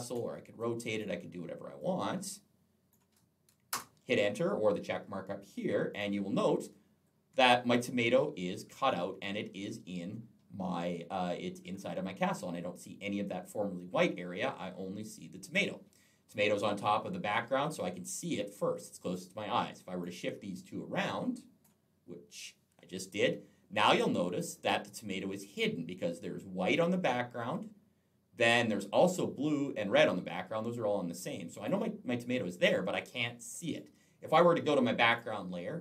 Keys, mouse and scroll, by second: 0.4 click, 1.6 click, 3.5 Return, 5.7 click, 6.3-6.6 alt+scroll up 1, 8.8 alt+scroll up 1, 13.8 alt+scroll down 1, 17.9 click, 20.7 click, 23.6 click, 33.6 click, 34.9 click.